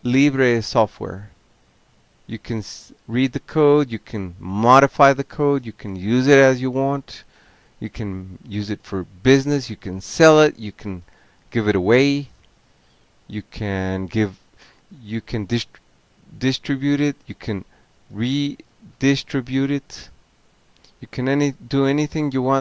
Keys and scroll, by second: 0.9 0, 1.9 6, 2.5 Return, 3.3 shift+m, 3.6 Tab, 4.4 Return, 4.9 Tab, 6.5 shift+e, 6.7 Tab, 7.2 Tab, 7.6 Tab, 8.8-11.0 typing, 12.1 Return, 14.1 Tab, 14.3 Tab, 14.5 BackSpace, 15.2 a, 15.4 Tab, 16.1 Tab, 17.4 alt+q, 18.8 ctrl+c, 19.1 ctrl+o, 21.6 ctrl+p.